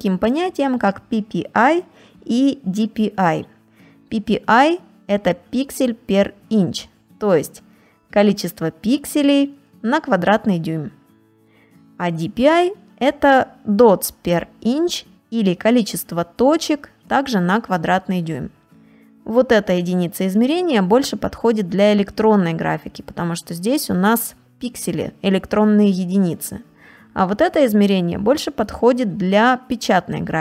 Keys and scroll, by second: 6.2 ctrl+space, 6.7 ctrl+space, 12.3 ctrl++, 12.9 space, 18.2 space.